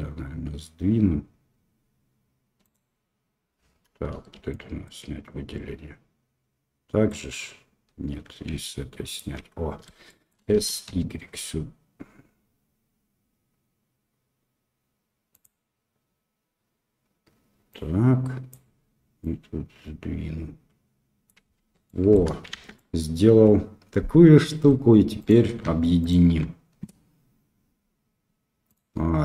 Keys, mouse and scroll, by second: 8.9 ctrl+click, 10.0 shift+click, 10.5 s, 19.2-21.5 drag, 21.5 Tab, 21.8-22.1 middle drag, 22.5 shift+z, 22.7-24.7 middle drag, 25.2 right click, 26.0 shift+click, 28.6-29.2 drag.